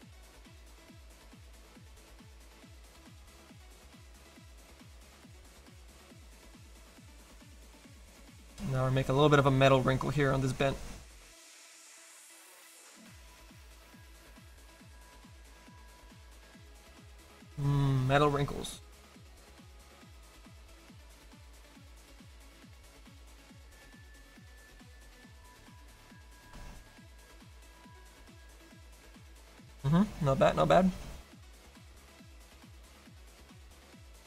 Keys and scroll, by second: 8.2 s, 19.9 s, 33.4 f.